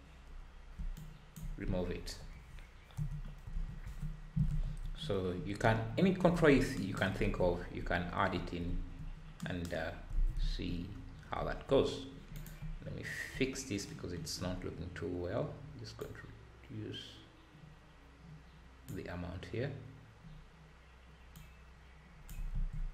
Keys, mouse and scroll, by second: 1.0-2.1 alt+drag, 2.1 Delete, 4.1-4.5 scroll down 2, 4.5 alt+a, 4.8 `, 7.5 scroll up 2, 7.7 `, 8.6 `, 9.8-10.1 scroll up 2, 10.1 ctrl+s, 10.9-11.4 scroll down 2, 11.4 `, 11.8-12.4 scroll up 2, 12.4 click, 12.5 `, 13.5 scroll down 3, 14.6-15.2 scroll up 7, 16.0-19.0 drag, 21.6 click, 22.5 ctrl+z.